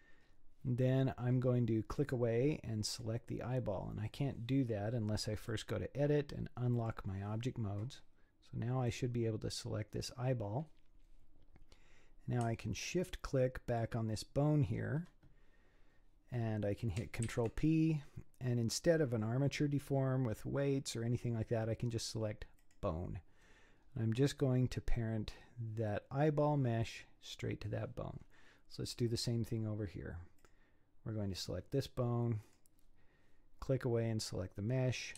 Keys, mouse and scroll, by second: 1.3-2.0 scroll up 5, 2.0 click, 2.9 click, 5.5-8.5 drag, 8.9 click, 11.6 scroll up 3, 13.7 shift+click, 17.2 ctrl+p, 23.7-24.7 scroll down 5, 27.4 scroll down 3, 28.1-29.1 scroll up 6, 29.1 click, 30.4 click, 32.4 click, 34.7 scroll up 4.